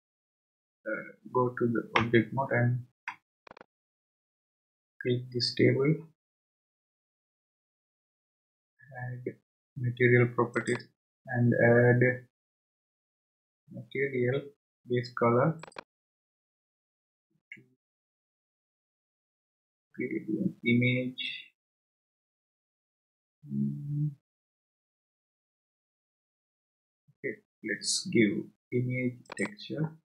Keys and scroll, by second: 2.0 Tab.